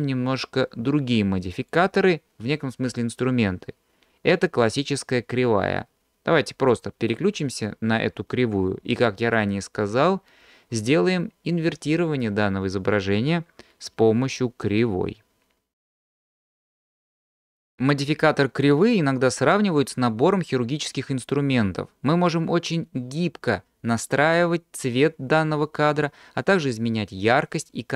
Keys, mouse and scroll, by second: 1.7-15.6 drag.